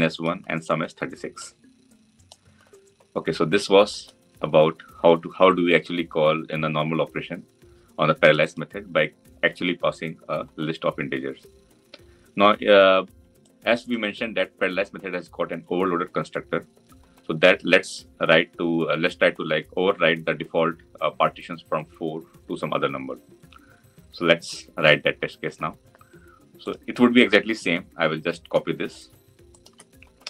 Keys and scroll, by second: 30.1 ctrl+c.